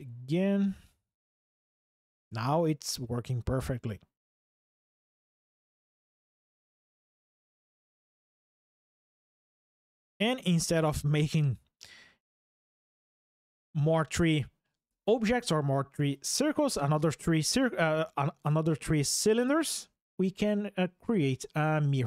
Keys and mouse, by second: 0.6 ctrl+drag, 8.5 click, 9.0 shift+middle drag, 10.5 shift+middle click, 11.3 middle click.